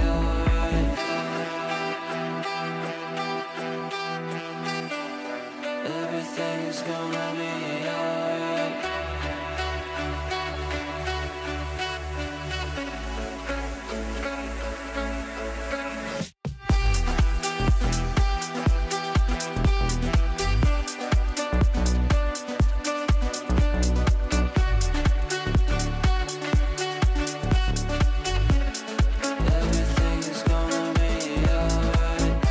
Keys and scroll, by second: 21.1 Delete.